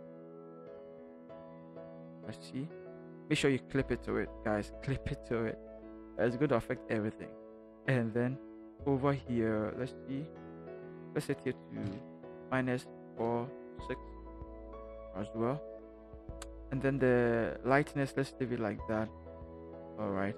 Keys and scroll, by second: 1.0 Left, 1.6 -.